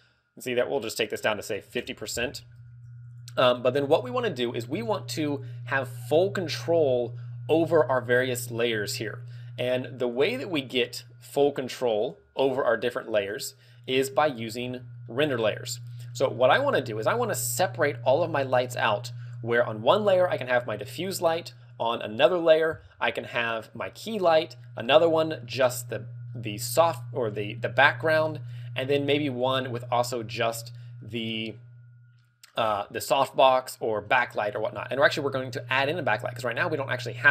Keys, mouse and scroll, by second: 0.8 ctrl+click, 1.9 ctrl+click, 2.7 ctrl+w, 6.1 middle click, 6.9-7.6 scroll up 2, 7.6 scroll up 1, 17.4 click, 18.2 scroll down 2, 18.6 middle click, 36.9 click.